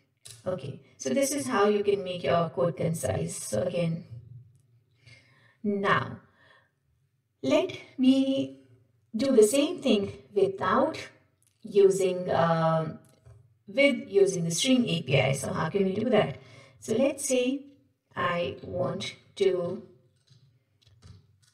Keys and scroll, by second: 17.0 alt+Insert, 18.9 alt+Home, 19.6 Left, 20.2 Right, 21.1 alt+Insert.